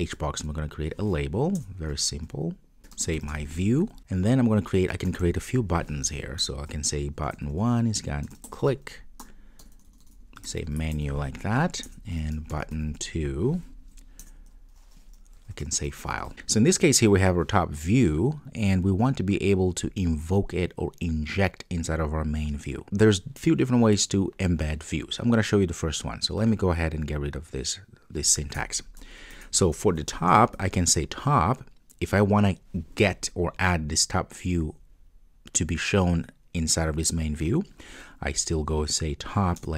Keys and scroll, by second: 1.6 Return, 6.5 Return, 14.3 Return, 39.6 Return.